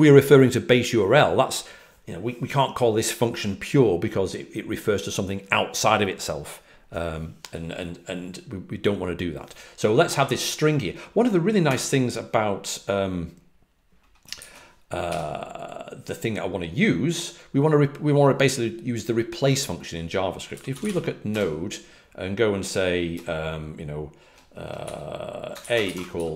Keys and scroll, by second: 13.1-13.9 typing, 20.7-21.2 typing, 25.2-26.3 typing.